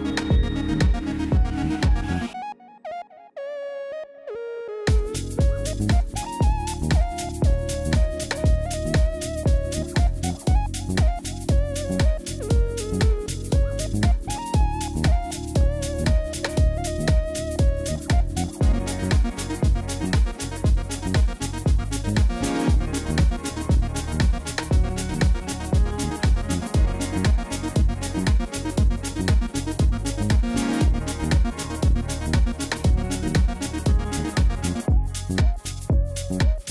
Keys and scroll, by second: 6.4 alt+a, 10.0 shift+d, 27.8 9, 29.0 e, 31.5 Return, 36.0 ., 36.2 9, 36.5 Return.